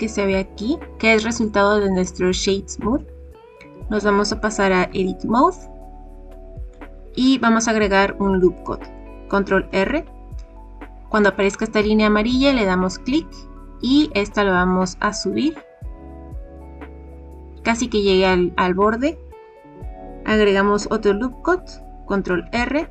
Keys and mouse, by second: 4.8 Tab, 9.4 ctrl+r, 16.6 click, 22.2 ctrl+r.